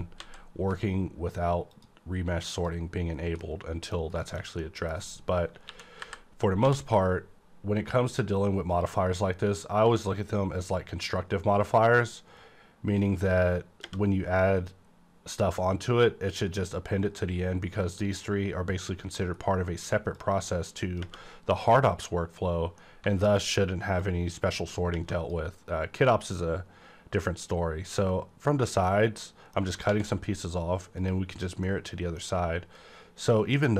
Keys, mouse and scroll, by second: 0.2 z, 1.7 click, 2.5 click, 3.4 middle click, 4.2 shift+middle click, 5.6 KP_1, 6.0 KP_5, 6.6 d, 8.1 click, 8.7 click, 13.0-20.1 drag, 20.1-22.8 drag, 22.8-24.9 middle drag, 24.0-27.7 drag, 27.8-28.9 scroll up 1, 28.9-31.0 middle drag, 29.9 alt+x, 31.0 click, 31.6 middle click, 32.4-32.9 scroll up 1, 32.9-33.3 scroll down 1, 33.3-33.7 middle drag.